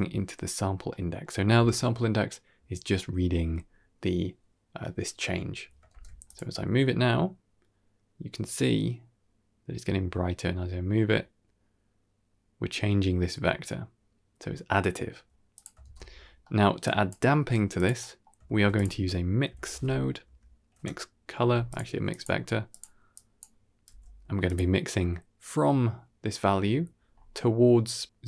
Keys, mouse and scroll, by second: 0.6 scroll down 1, 0.8-1.1 middle drag, 2.8-3.2 middle drag, 3.3-3.7 scroll up 3, 5.8 shift+space, 6.1 click, 6.5 g, 15.7 shift+space, 16.3 middle click, 16.7-17.0 drag, 17.3 g, 17.9 middle click, 18.3 shift+a, 22.0-22.7 drag, 23.0 click, 23.8 g, 26.9-27.4 scroll up 3, 27.2 middle click.